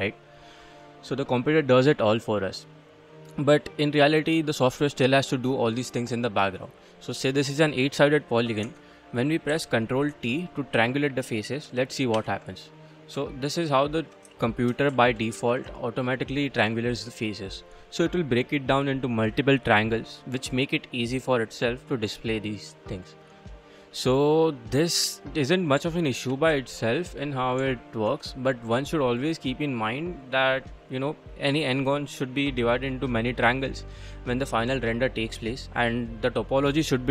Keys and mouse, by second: 1.1-3.2 middle drag, 4.0-4.4 middle drag, 5.9-6.3 middle drag, 8.7 Tab, 9.5 a, 10.8 a, 12.2 ctrl+t, 13.3 ctrl+click, 13.5 ctrl+click, 14.4 shift+click, 14.6 shift+middle click, 15.0 ctrl+middle click, 15.7 middle click, 16.9 middle click, 21.5 middle click, 24.7 middle click, 25.9 ctrl+middle click, 26.7 shift+middle click, 27.0 middle click, 27.7 ctrl+middle click, 28.3 shift+click.